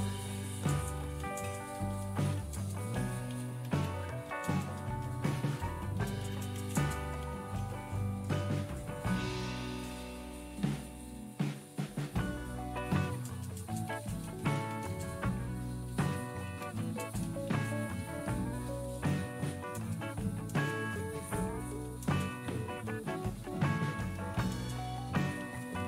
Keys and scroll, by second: 0.1-8.0 typing, 8.1 Return, 8.3 Return, 8.6 Return, 12.4-18.1 typing, 19.6-20.4 typing, 21.7-25.8 typing.